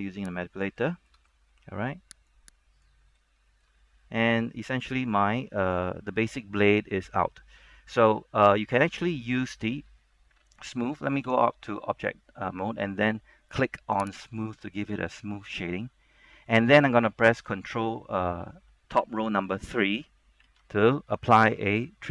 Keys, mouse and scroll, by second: 1.0 shift+middle click, 1.4-2.4 scroll up 1, 2.4 click, 3.1 scroll down 1, 3.9-4.5 scroll up 1, 4.5 a, 4.7 middle click, 6.6 scroll up 1, 6.8 middle click, 8.4 scroll down 1, 8.6 middle click, 11.4 Tab, 14.5 click, 14.9 middle click, 20.6 ctrl+3, 21.1-22.1 middle drag.